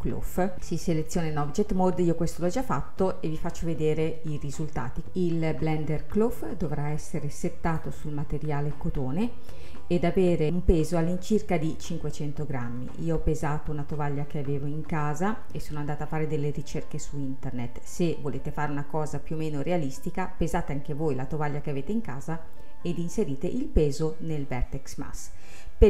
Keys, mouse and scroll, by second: 0.5 click, 7.8-10.5 drag, 10.5-12.8 scroll down 1.